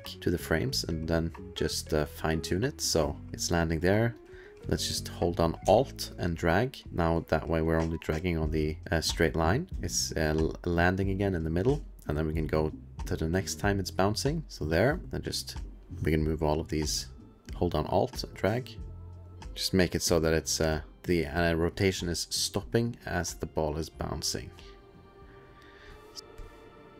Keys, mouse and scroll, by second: 0.9 click, 3.3 click, 4.2 click, 6.1-6.6 alt+scroll, 6.6-7.8 alt+click, 6.8 click, 7.9-9.2 alt+scroll, 9.4 alt+middle click, 9.7 alt+space, 9.7 click, 10.3 click, 10.7 click, 15.0 click, 15.3 click, 15.8 click, 17.8-20.4 alt+click, 19.4 alt+click, 19.6 click, 20.0 click, 20.9 alt+click, 21.7 click, 25.2 click, 25.7 Left, 26.0 click, 26.3 alt+middle click, 26.5 click, 26.7 alt+click.